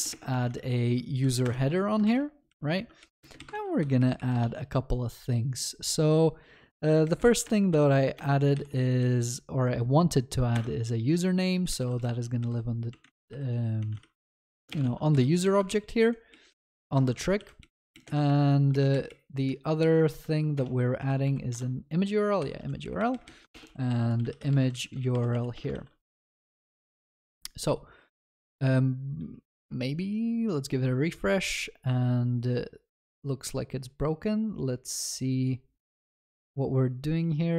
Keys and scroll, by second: 1.5 Return, 3.5 ctrl+s, 10.6 Return, 14.9 ctrl+s, 15.6 ctrl+shift+Left, 17.1 ctrl+c, 20.2 ctrl+w, 22.4 Escape, 25.7 ctrl+BackSpace, 25.8 ctrl+s.